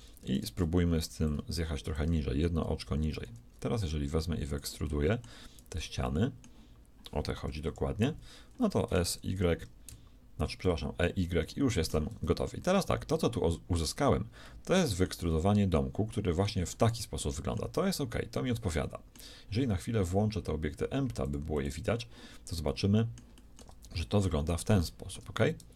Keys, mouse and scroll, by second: 1.2-3.2 drag, 1.2 middle click, 1.2 right click, 2.9 a, 3.4 b, 5.0-6.5 middle drag, 5.7 b, 7.6 KP_3, 8.9 e, 11.4-15.2 shift+middle drag, 17.8 z, 21.2-23.2 drag, 22.6 right click, 22.8-25.7 middle drag, 23.6 Tab.